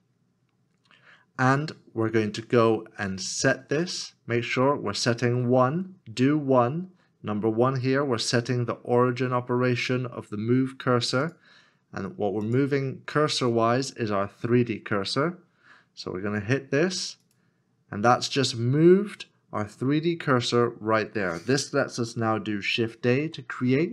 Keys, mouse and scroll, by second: 22.5 0, 23.0 shift+a.